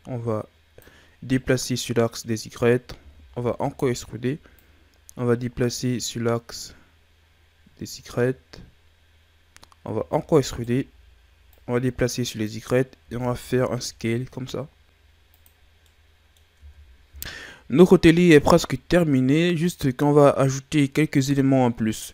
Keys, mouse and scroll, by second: 1.4-3.0 middle drag, 3.0 e, 4.6 click, 10.0 e, 11.5 click, 13.0 s, 15.7 scroll down 2, 15.8 middle click, 16.5 Tab, 18.2-21.2 middle drag.